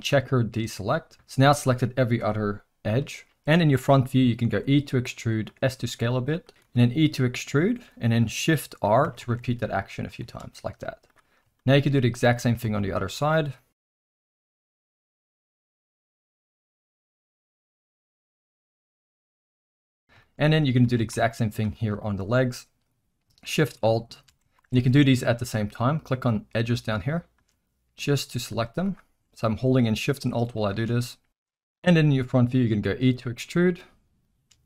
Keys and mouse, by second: 1.6 z, 2.9 KP_1, 3.3 shift+middle click, 4.5 e, 5.6 s, 6.6 e, 8.8-10.7 typing, 11.5 shift+middle click, 12.4 alt+a, 12.9 shift+click, 14.1 F3, 15.7 e, 16.1 s, 16.7 e, 18.0-19.1 shift+r, 19.8 shift+middle drag, 20.2 shift+middle drag, 20.8 alt+a, 21.1 z, 22.0 shift+middle drag, 23.7 shift+click, 24.6 ctrl+z, 25.3 shift+click, 27.0 shift+click, 27.7-28.0 middle drag, 28.5 z, 30.0 shift+click, 30.6 click, 31.0 KP_1, 31.0 shift+middle click, 32.7 e.